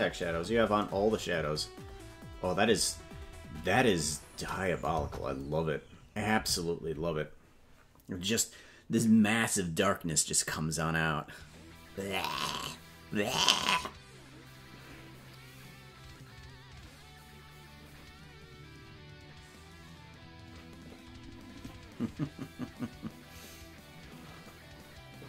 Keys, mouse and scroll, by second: 3.6-4.5 scroll down 7, 5.3 KP_0.